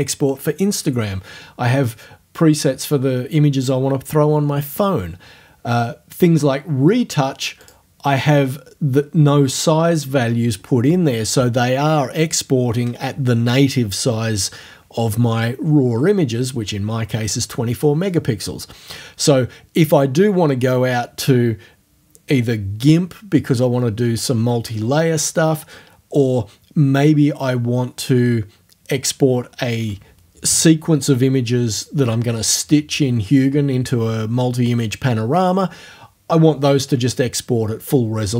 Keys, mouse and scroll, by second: 7.6 click.